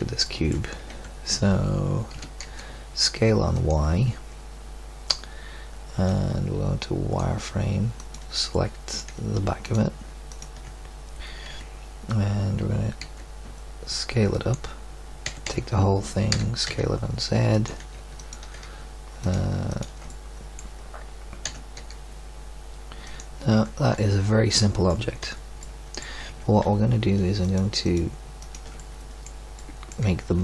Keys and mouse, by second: 0.8 Tab, 2.1 s, 6.1-7.0 drag, 11.5 KP_1, 13.0 s, 15.2 a, 15.4 a, 16.3 s, 18.1-20.2 drag, 20.2 middle click, 21.4 e, 23.5 Tab, 25.2 z, 26.2 Tab, 29.1 middle click.